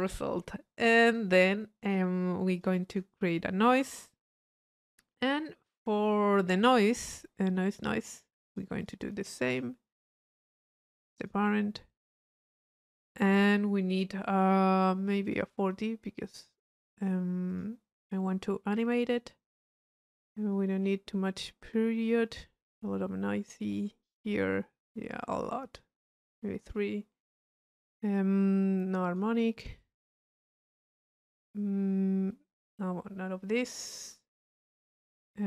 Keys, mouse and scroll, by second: 0.8 click, 1.7 middle click, 2.5 click, 3.0 Tab, 7.8 click, 8.5 click, 9.5 click, 10.1 click, 11.1 click, 12.3 click, 15.2 click, 15.7 click, 17.5 click, 20.8-27.5 middle drag, 28.4-30.9 drag, 31.4-32.8 drag, 34.9-35.4 drag.